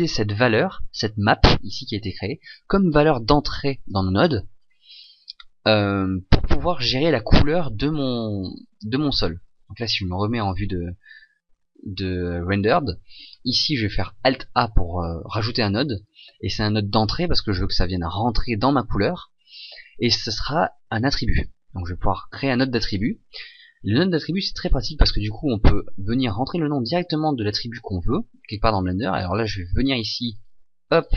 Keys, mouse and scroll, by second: 4.2 click, 9.8 shift+z.